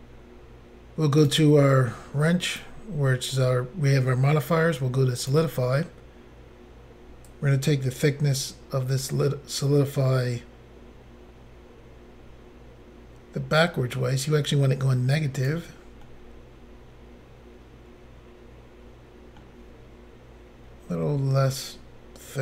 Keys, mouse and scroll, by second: 1.2 click, 2.5 click, 5.2 click, 5.3 click, 7.3 click, 16.1 middle click, 21.6 click, 21.7 click.